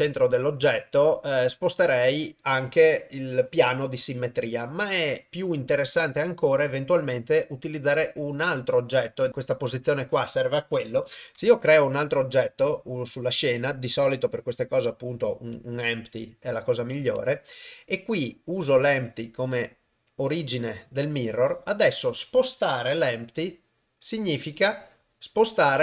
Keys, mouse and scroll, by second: 11.3 shift+a, 23.2 g.